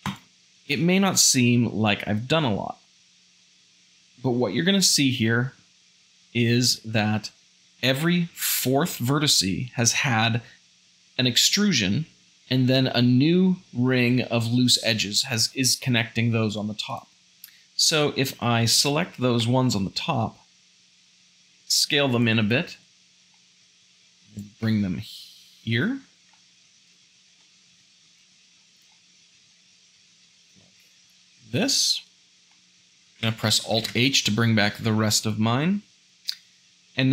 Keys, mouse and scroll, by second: 16.9 alt+click, 21.2 s, 22.5 `, 23.3 g, 26.3 s, 28.1 `, 28.5 s, 31.0 `, 33.8 alt+h, 34.8 Tab.